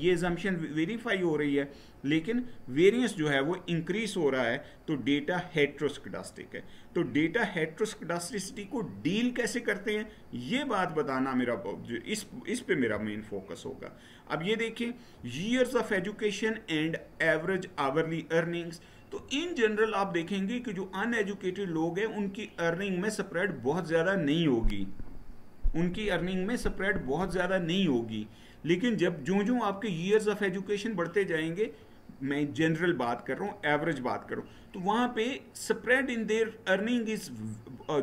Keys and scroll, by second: 12.6 Right.